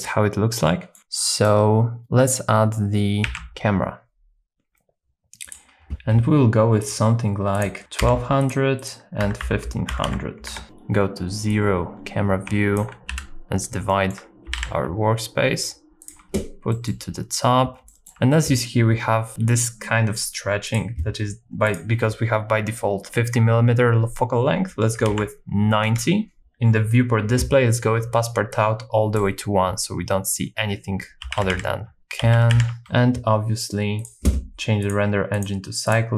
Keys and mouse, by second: 0.0 click, 0.7 middle click, 3.3 shift+a, 5.9 KP_Enter, 5.9 r, 5.9 x, 5.9 KP_9, 5.9 KP_0, 7.6 click, 8.9-10.5 drag, 10.0 KP_0, 10.6 KP_0, 11.5-12.8 drag, 13.1 n, 13.9 shift+middle click, 14.5 g, 14.6 z, 16.9 middle click, 17.9 shift+middle click, 21.6-25.9 drag, 28.6 click, 31.2-32.8 typing, 34.9 click, 36.0 click.